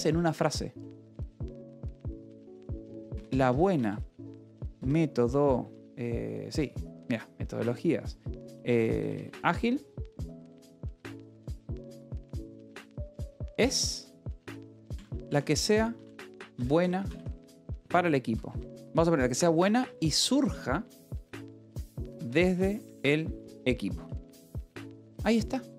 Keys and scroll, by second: 1.1 a, 1.2 space, 1.4 BackSpace, 2.7-5.5 typing, 7.0 Return, 7.4 space, 8.6 BackSpace, 8.9 space, 9.5 a, 10.1 BackSpace, 11.3-23.9 typing, 24.2 Escape.